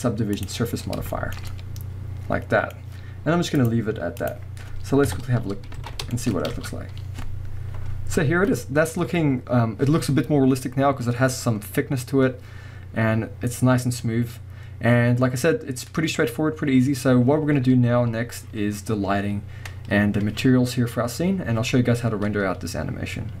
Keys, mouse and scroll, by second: 0.8-1.1 scroll down 2, 1.1-3.6 shift+middle drag, 3.6 click, 4.2 click, 5.0 KP_0, 5.8 alt+a, 6.0 scroll down 1, 6.1-10.0 shift+middle drag, 6.3 scroll up 1, 6.6 space.